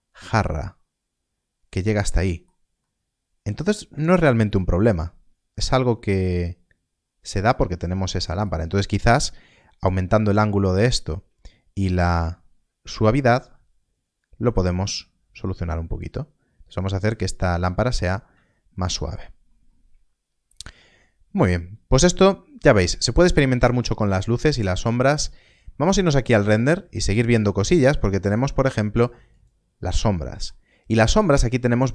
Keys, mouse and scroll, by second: 0.0 middle click, 4.1 KP_0, 6.1 scroll down 1, 8.4 click, 18.7 shift+middle click, 19.4 scroll up 1, 21.4 scroll down 1, 21.9-24.1 scroll up 1, 25.0-26.5 scroll up 1, 26.5 middle click, 30.0 middle click.